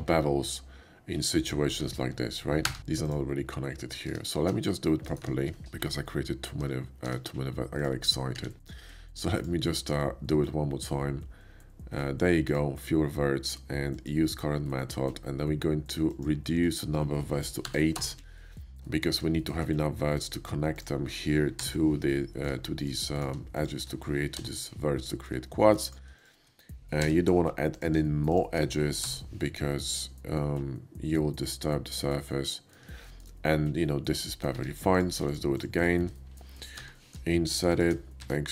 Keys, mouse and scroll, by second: 1.7 Tab, 2.5 3, 2.8 click, 4.1 Tab, 4.5 Tab, 4.5 z, 5.0 ctrl+right click, 5.2 ctrl+z, 6.0 ctrl+z, 6.1 ctrl+z, 6.9 Tab, 7.3 middle click, 7.7 drag, 8.0 middle click, 8.3 q, 9.1 click, 12.4 click, 13.9 click, 14.5 middle click, 15.9 click, 17.6 8, 18.0 Return, 18.7 8, 20.1 click, 20.7 shift+click, 21.5 j, 22.4 shift+middle click, 22.7 shift+middle click, 23.0 shift+click, 23.2 middle click, 23.5 click, 24.3 j, 25.7 shift+click, 26.2 shift+click, 26.9 j, 27.5 click, 28.3 shift+click, 28.9 j, 29.7-30.9 middle drag, 31.0-31.9 middle drag, 32.6 middle click, 33.2-34.3 shift+middle drag, 34.4 shift+middle click, 34.5 Tab, 34.9 click, 35.3 shift+click, 35.6 click, 35.8 click, 36.7 i, 37.7 shift+click, 38.0 e.